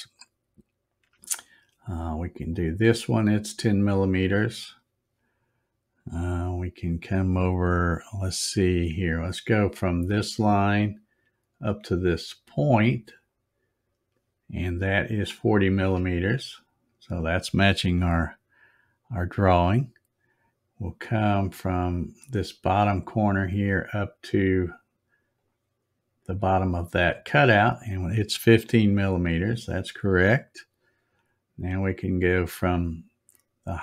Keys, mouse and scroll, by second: 2.5 click, 4.0 click, 10.4 click, 13.1 click, 16.5 click, 22.0 click, 25.3 click, 29.5 click, 32.7 click.